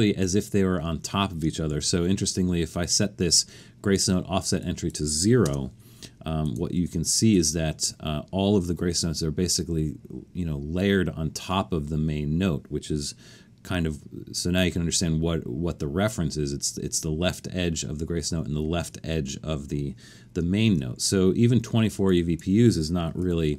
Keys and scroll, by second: 1.7 alt+super+a, 5.4 0, 20.6 alt+super+a, 22.8-23.5 typing.